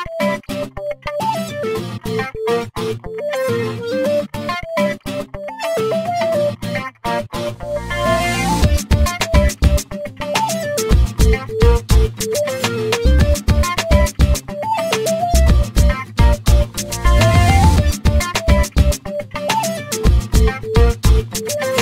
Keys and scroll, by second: 5.4 p, 17.8 l, 20.0 5, 20.2 0, 20.8 Return.